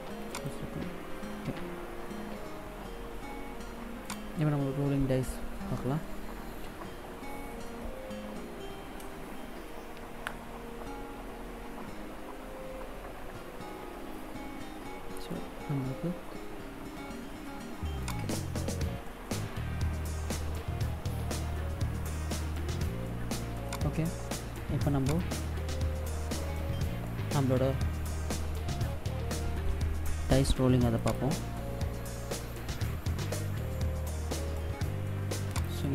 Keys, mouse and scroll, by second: 2.4 click, 3.8 click, 17.8 click, 21.3 click, 23.4 click, 24.9 click, 30.7 click, 35.2 click.